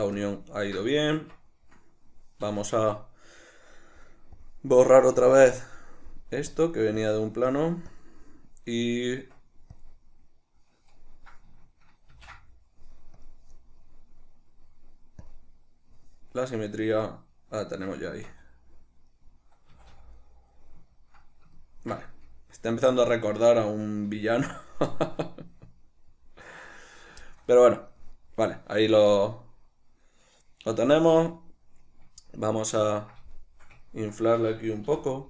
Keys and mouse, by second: 0.3 ctrl+middle click, 1.3 Tab, 4.5 click, 5.5 click, 6.6 click, 8.0 click, 9.3 Tab, 12.7 ctrl+d, 13.3-17.1 drag, 17.1-19.2 middle drag, 18.2 Tab, 19.8 a, 20.3 middle click, 22.2 z, 22.9 shift+middle click, 23.5 right click, 24.3 z, 25.0-35.2 middle drag, 31.1 Tab.